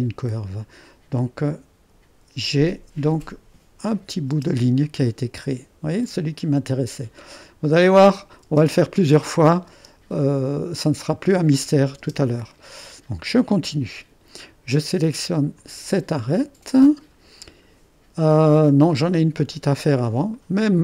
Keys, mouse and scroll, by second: 3.9 click, 4.4 space, 4.7-7.6 drag, 8.1-9.3 drag, 8.7 space, 9.7 space, 12.0 space, 12.7 click, 15.6 click, 18.9 click, 19.8 click, 20.4-20.8 middle drag.